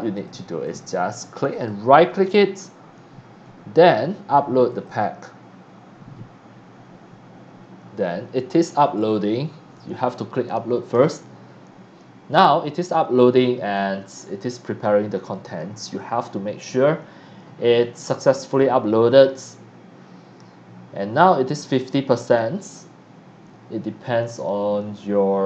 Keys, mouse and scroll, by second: 0.1 click, 0.6 click, 1.5 right click, 4.1-4.5 right drag, 4.7 click, 10.9 click.